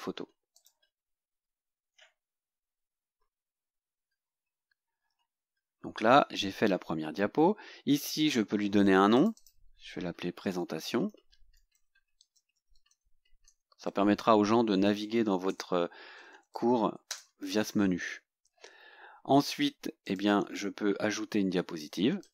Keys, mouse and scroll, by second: 0.5 click, 5.7 scroll up 1, 8.0 click, 9.1 click, 10.3-14.8 typing, 15.9-17.0 typing, 17.1 Return, 20.0 click, 22.2 click.